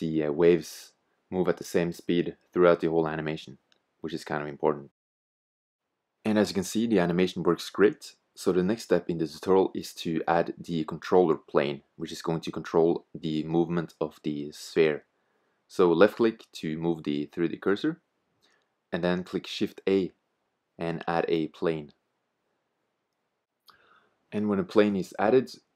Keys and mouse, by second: 0.0 t, 1.5-3.2 middle drag, 5.9-7.7 drag, 10.3 middle drag, 13.0-14.9 drag, 14.9-15.5 middle drag, 15.5-18.2 drag, 16.3 middle click, 18.5 middle click, 18.7-19.0 middle drag, 19.1 middle drag, 19.5 middle click, 19.7 click, 20.0 middle click, 20.1 middle click, 23.4-25.2 drag, 24.0 shift+a.